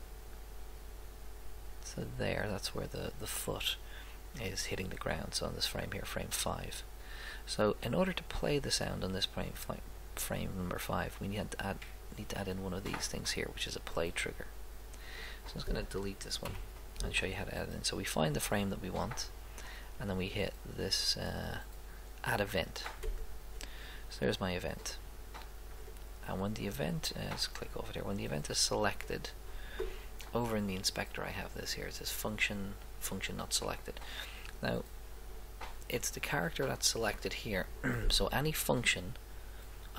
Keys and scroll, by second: 16.4 Delete.